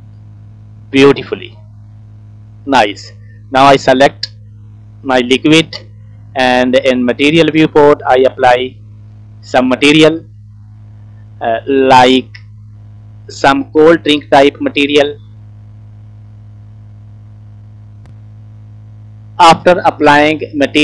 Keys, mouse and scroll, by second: 0.0 scroll down 3, 0.2 middle click, 1.0-1.7 scroll up 3, 1.7 scroll down 1, 1.7-2.1 scroll down 3, 2.1 middle click, 2.8 shift+middle click, 3.2 middle click, 4.0 click, 4.7 middle click, 5.4 shift+middle click, 6.6 click, 7.7 click, 8.9 shift+middle click, 11.9 click, 17.9 middle click.